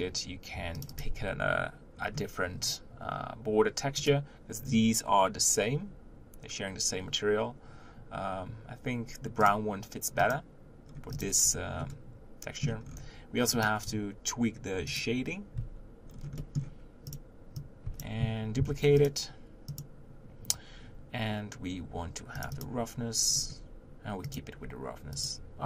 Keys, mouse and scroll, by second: 1.9-3.9 scroll up 3, 4.2 drag, 10.9 scroll down 1, 11.1 click, 11.4-11.9 scroll down 3, 11.9-12.8 middle drag, 12.8-13.5 scroll up 1, 13.5 click, 14.9-15.3 drag, 17.1 click, 18.6 shift+d, 19.9-22.6 drag, 24.7-25.6 drag.